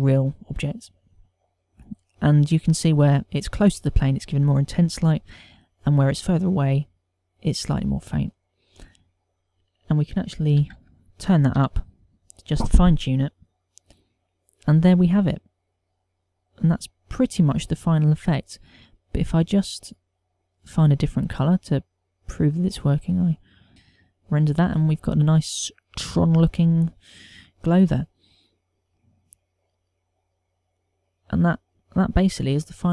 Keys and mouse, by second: 10.2 click, 20.5 click, 23.7 F12.